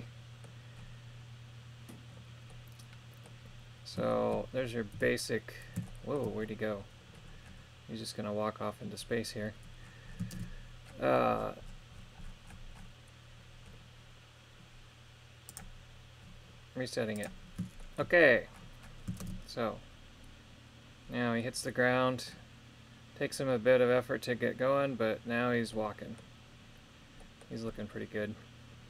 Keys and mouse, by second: 0.1 middle click, 2.6 middle click, 4.2 shift+middle click, 5.0 KP_3, 5.9 shift+middle click, 10.4 shift+space, 15.6 click, 17.2 click, 17.8 shift+middle click, 19.2 shift+space, 21.4 middle click, 25.8 middle click, 27.2 middle click.